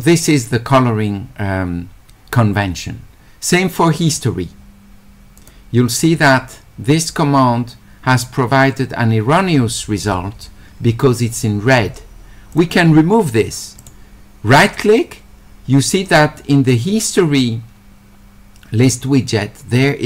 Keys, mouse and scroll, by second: 4.0 click, 5.4 click, 12.5 click, 13.8-15.4 right drag.